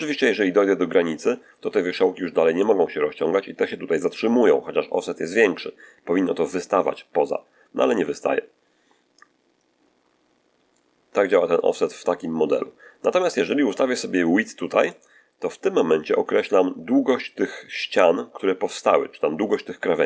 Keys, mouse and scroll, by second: 9.1-14.0 drag, 14.8 click.